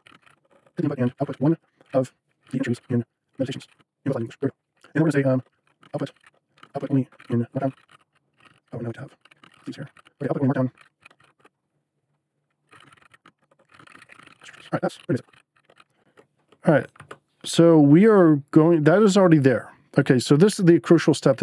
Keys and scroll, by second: 0.0-16.8 typing, 4.8 Return.